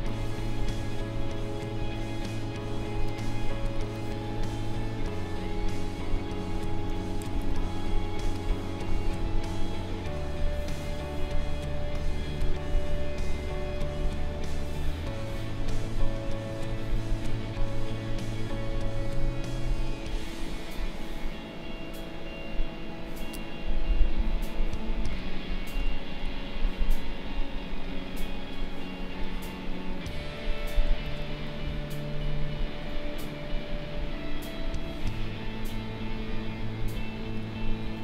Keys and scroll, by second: 2.8 space, 5.8 ctrl+=, 7.8 space, 31.0 0.